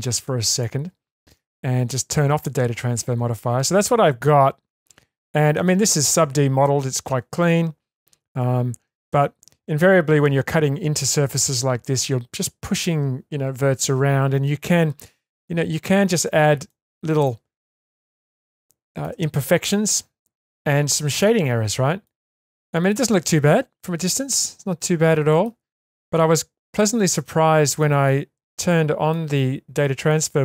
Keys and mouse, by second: 0.5 click, 3.4-4.8 middle drag, 5.6 shift+space, 9.1 shift+space, 16.7-17.3 middle drag, 17.7-18.1 shift+middle drag, 18.6-19.1 shift+middle drag, 19.8-22.0 shift+middle drag, 23.2-25.4 middle drag, 27.1-27.7 shift+middle drag, 28.7 middle click.